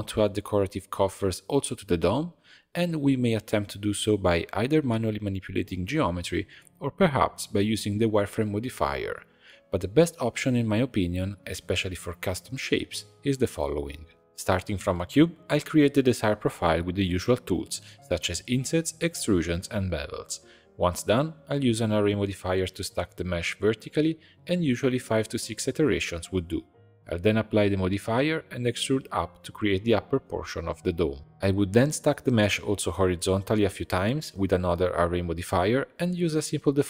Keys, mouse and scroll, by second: 0.1 scroll up 1, 0.4 Tab, 0.9-1.4 scroll up 1, 1.4 alt+a, 2.5 i, 4.6 alt+e, 5.8 Tab, 6.1 middle click, 6.6-8.5 drag, 8.8 click, 9.0 click, 10.1-12.8 shift+drag, 12.9-14.3 middle drag, 14.3 click, 15.5-20.4 typing, 15.6 alt+click, 15.8 scroll down 1, 15.8 shift+middle click, 16.8 shift+middle click, 17.0 alt+click, 17.6 ctrl+r, 18.2 ctrl+b, 18.8 click, 18.9 middle click, 19.4 middle click, 20.2 alt+click, 20.9 ctrl+r, 21.1-25.0 drag, 25.7 click, 26.6 scroll down 2, 26.8 shift+middle click, 27.0 click, 27.6 e, 30.8 Tab, 31.0-33.7 drag, 33.7 shift+middle click, 34.4-35.8 scroll down 1, 35.8-36.8 drag.